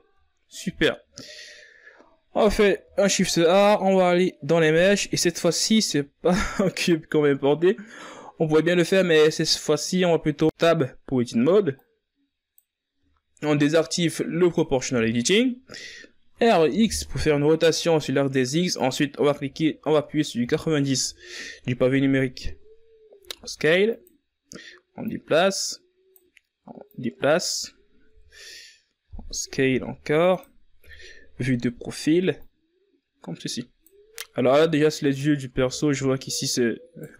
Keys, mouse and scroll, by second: 0.8 shift+a, 11.8-12.3 scroll down 1, 12.3 scroll up 2, 12.6 Tab, 14.2-17.0 drag, 18.8 r, 25.2-25.7 scroll up 2, 25.7 s, 26.8-27.6 scroll up 2, 27.6-30.6 drag, 30.6 KP_1, 32.0 s, 33.3 KP_3, 34.9-36.6 drag, 36.6-37.0 scroll up 1, 37.0 Tab.